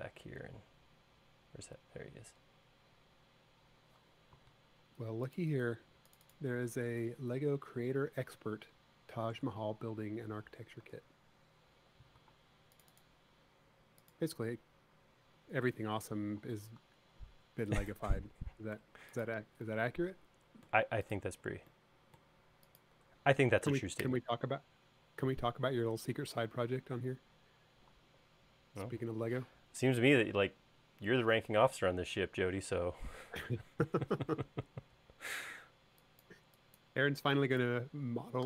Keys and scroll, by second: 9.5 BackSpace, 11.1 super+z, 14.8 BackSpace, 19.0 BackSpace, 21.7 BackSpace, 23.2 BackSpace, 34.0 e.